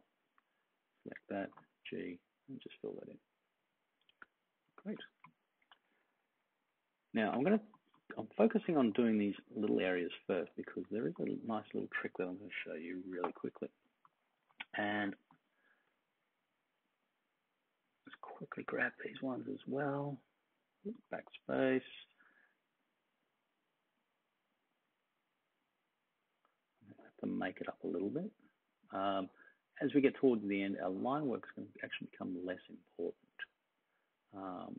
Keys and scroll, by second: 1.5 g, 4.8 super+d, 5.7 super+-, 5.9 super+-, 6.1 super+-, 6.2 super+-, 7.3 space, 8.4 space, 8.8 space, 9.3-10.6 space, 13.1 ], 14.3 super+=, 14.9 space, 20.9 BackSpace.